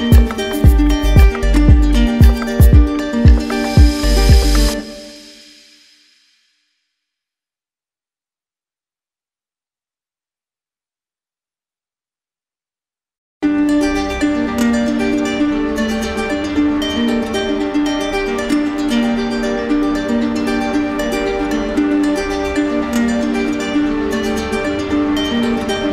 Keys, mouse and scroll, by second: 3.8 click, 6.0 right click, 7.2 click, 8.8 alt+click, 9.8 click, 13.1 click, 17.5 click, 22.0 click, 23.1 click.